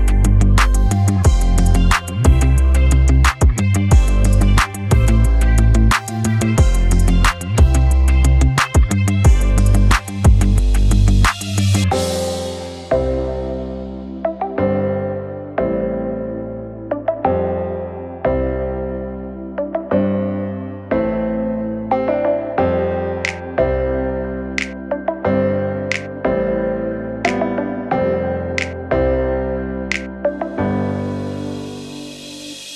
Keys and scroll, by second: 25.6 d.